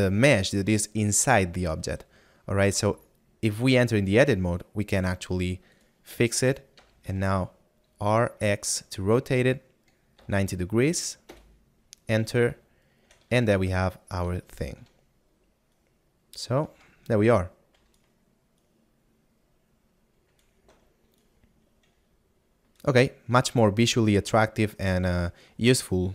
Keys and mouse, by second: 13.3 shift+Tab, 16.3 right click, 19.0 right click, 20.3 Escape.